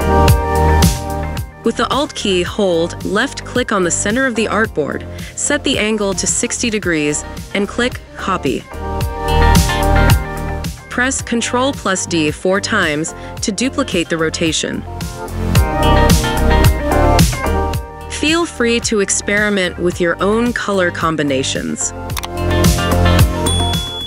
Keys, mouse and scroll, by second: 3.9 alt+click, 9.9 ctrl+d, 10.9 ctrl+d, 15.7 ctrl+d, 19.4 ctrl+click, 21.0 ctrl+click, 22.1 ctrl+click.